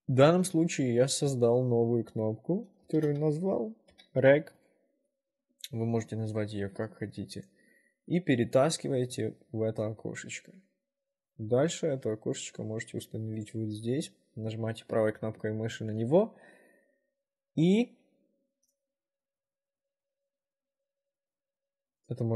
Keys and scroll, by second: 2.8-4.1 typing.